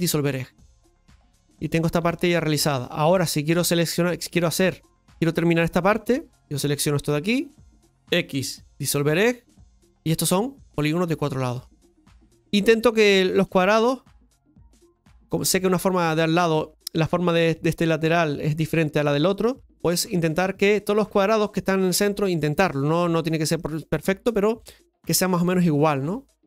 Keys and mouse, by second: 0.0 x, 5.9 right click, 6.8 shift+right click, 10.0 right click, 10.7 shift+right click, 11.1 shift+right click, 11.5 shift+right click, 13.2 right click, 13.4 g, 15.2 right click, 16.4 g, 16.9 right click, 18.9 g, 20.0 right click, 20.8 g, 22.3 right click, 22.5 g, 25.7 right click.